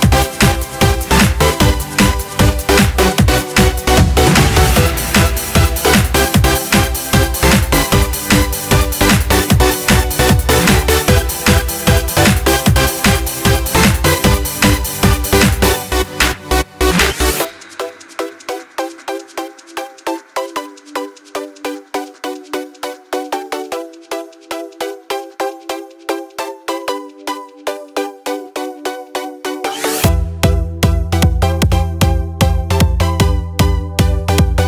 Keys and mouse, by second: 0.0 click, 1.2 click, 1.8-4.1 middle drag, 4.7 click, 6.0 shift+a, 11.2 s, 23.4 click, 24.2-28.4 middle drag, 29.6 click.